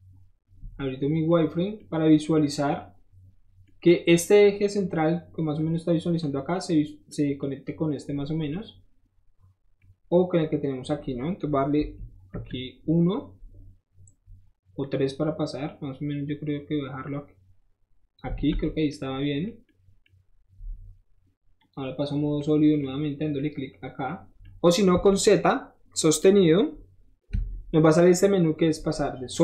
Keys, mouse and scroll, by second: 0.6 middle click, 1.6-6.2 middle drag, 7.1 middle click, 8.5-9.8 middle drag, 11.9 KP_1, 12.3 KP_3, 14.8-18.1 drag, 18.4 alt+z, 18.7 middle click, 18.8 middle click, 21.6 click, 22.3 middle click, 24.3 middle click, 24.4 middle click, 27.4-29.4 middle drag, 27.4 z.